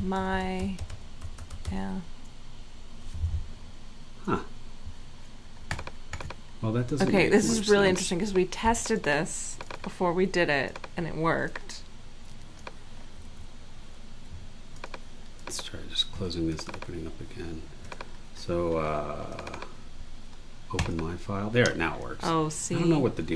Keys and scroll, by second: 0.0-2.1 typing, 13.3 super+w.